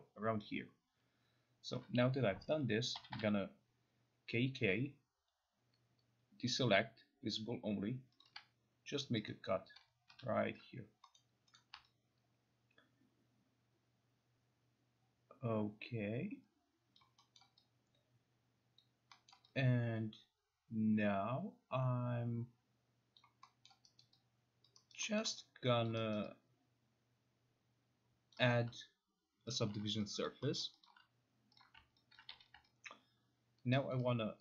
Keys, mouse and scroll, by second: 3.0 k, 3.1 k, 8.2 click, 8.8 click, 9.3 shift+click, 10.1 Escape, 11.2-11.6 scroll, 17.0 alt+click, 17.4-17.9 alt+scroll, 18.8 alt+click, 19.3 alt+middle click, 23.2 alt+click, 23.7 alt+middle click, 24.0 alt+right click, 24.7 alt+click, 24.9 alt+right click, 25.2 alt+middle click, 25.8 alt+click, 26.1 alt+right click, 28.3 alt+click, 29.6 alt+click, 30.2 alt+click, 30.6 alt+middle click, 30.8 alt+click, 32.1 alt+click, 32.3 q, 33.9 alt+click.